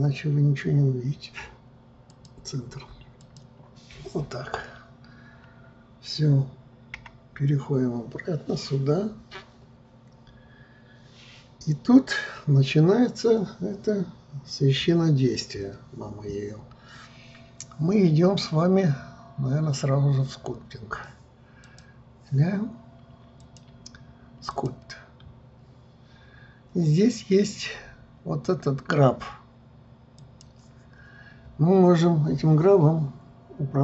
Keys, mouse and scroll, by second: 7.1 KP_1, 21.8 click, 23.5-26.6 drag, 30.3-33.3 drag.